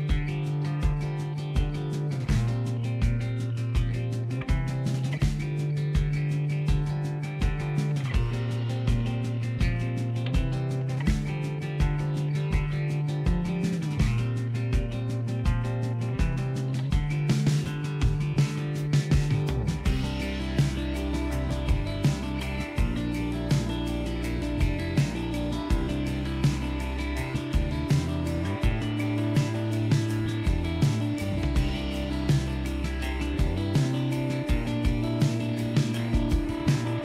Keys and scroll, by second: 5.1 ], 22.0 ctrl+z, 34.5 ctrl+s.